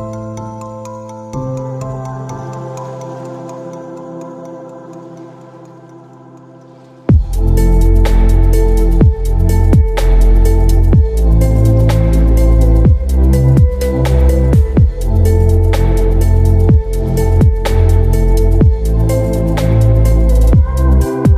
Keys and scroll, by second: 14.9 9, 15.3 0, 15.9 Return.